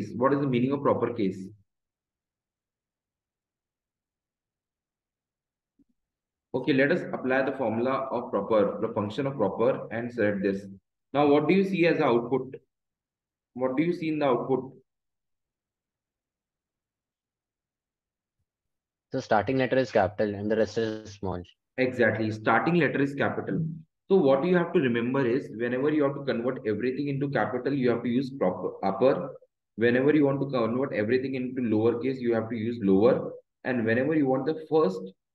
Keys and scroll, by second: 10.4 shift+0, 12.0 shift+Down, 16.4 Down, 20.4 Up, 24.0 Left, 25.4 Up, 26.0 Down, 26.5 Left, 29.5 Right, 32.0 Up, 33.0 Down, 34.0 Right.